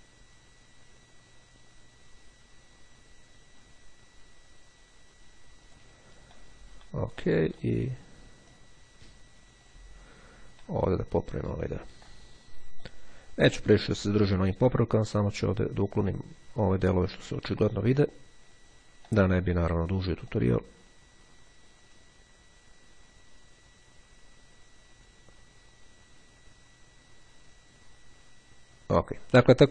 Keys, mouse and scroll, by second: 8.6-10.3 drag, 10.7 middle click, 10.7-12.3 scroll up 3, 12.9-19.3 drag, 20.4-29.7 drag.